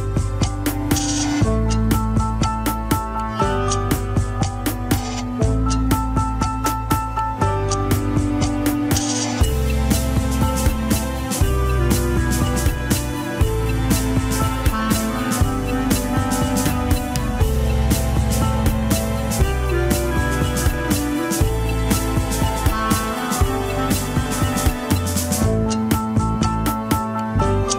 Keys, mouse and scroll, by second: 0.3 middle click, 1.1 click, 1.3 alt+z, 5.2-5.7 scroll up 2, 5.7 alt+z, 5.9 alt+z, 6.9 click, 7.2 g, 10.0 alt+z, 10.5 click, 10.8 alt+z, 11.2 g, 12.5 shift+middle click, 13.2 alt+z, 13.8-15.1 middle drag, 15.1 click, 15.5 alt+z, 15.7 KP_1, 16.0 shift+middle click, 16.9 scroll down 2, 17.3 middle click, 17.7 g, 18.8 KP_1, 19.5 scroll down 3, 20.0 g, 21.0 KP_1, 21.1 scroll up 3, 21.4 alt+z, 21.9 click, 22.3 alt+z, 22.4 scroll up 2, 22.5 shift+middle click, 23.0 g, 24.0 scroll down 1, 24.2-25.3 middle drag, 25.3 scroll up 3, 25.4 KP_1, 26.0 g, 26.6 shift+middle click, 26.9 alt+z, 27.5 click.